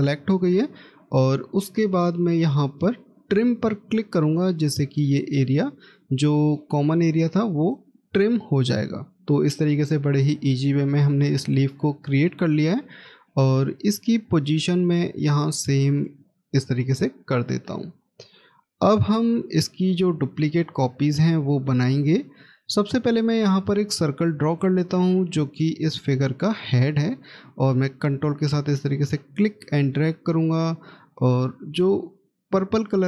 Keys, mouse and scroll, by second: 9.7 Delete, 11.6-12.4 scroll down 1, 13.1 middle click, 16.3-16.9 scroll up 1, 19.3 scroll down 1, 22.2 middle click, 26.7 ctrl+click.